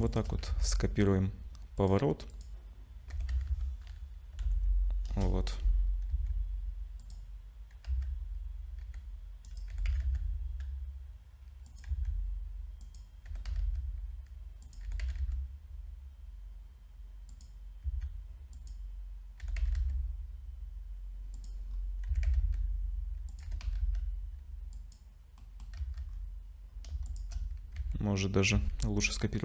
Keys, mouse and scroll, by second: 0.1 shift+click, 0.5 ctrl+c, 2.3 click, 3.1 r, 6.1 s, 7.9 z, 8.2-8.8 scroll up 2, 8.8 g, 9.7 g, 11.9 s, 13.3 g, 14.9 g, 17.8 s, 19.4 g, 21.7-22.1 scroll up 3, 22.1 s, 23.4 g, 25.4 middle click, 25.8 z, 26.1-26.5 scroll down 5, 26.7 scroll up 2, 27.1 shift+click, 27.8 ctrl+c, 28.5 ctrl+c.